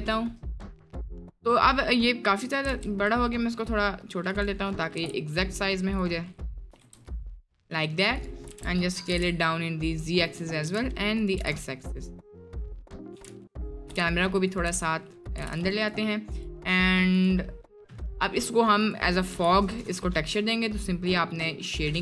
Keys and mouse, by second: 1.2 click, 1.8 middle click, 2.1-2.5 middle drag, 2.7 s, 4.9 g, 6.2 click, 6.7 s, 7.3 drag, 8.5 s, 9.1 g, 10.6 s, 11.4 g, 13.1 s, 13.9 g, 14.7 s, 15.4 g, 17.2 drag, 17.4 middle click, 18.1 middle click, 19.3 g.